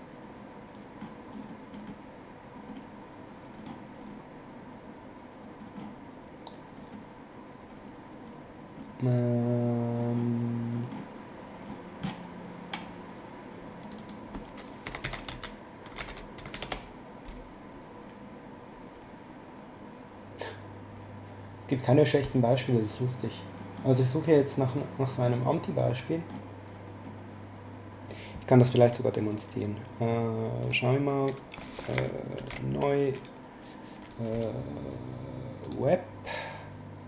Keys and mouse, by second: 13.8 click, 14.6-16.9 typing, 30.6 click, 32.3 ctrl+n, 35.6 click.